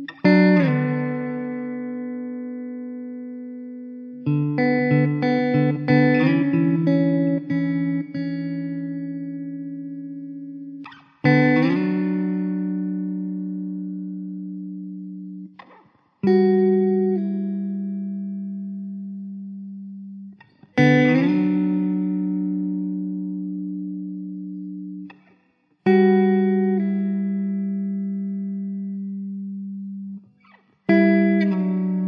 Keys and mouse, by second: 0.8 alt+middle click, 6.3 ctrl+z, 8.0 alt+middle click, 11.0 alt+w, 11.3 middle click, 14.3 middle click, 16.3 alt+w, 19.0 r, 25.1 alt+w, 26.5 middle click, 30.3 alt+w.